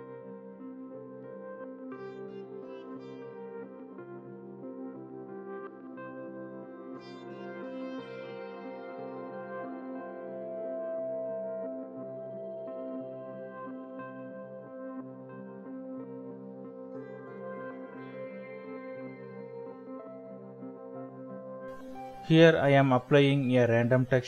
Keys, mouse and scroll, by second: 1.3 shift+middle click, 2.6 shift+middle click, 11.2 middle click, 13.2 typing, 14.8 typing, 16.5 Escape, 18.2-19.2 typing, 21.0 Return, 23.9 ctrl+t.